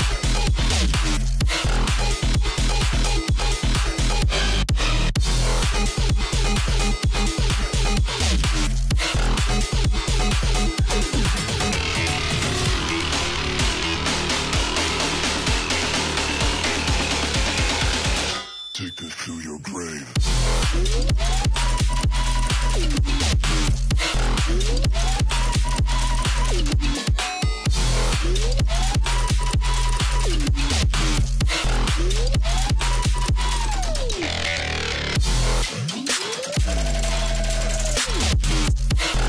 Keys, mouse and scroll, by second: 0.5 click, 2.7 click, 3.7 a, 4.4 alt+scroll up 1, 4.7 click, 5.3-9.2 shift+drag, 9.2 ctrl+z, 10.1 alt+scroll down 1, 10.6-11.2 alt+scroll down 1, 11.2 i, 11.5 click, 12.5 click, 13.5 alt+scroll up 1, 13.6 click, 14.0 alt+scroll up 1, 14.5 a, 14.9-17.7 shift+drag, 17.9 alt+scroll down 1, 18.2 alt+scroll up 1, 19.2-22.1 drag, 22.1 click, 23.8-27.2 drag, 27.8 alt+scroll up 1, 27.9 space, 27.9 click, 32.0-34.0 drag, 34.0 space, 39.0 alt+scroll down 1.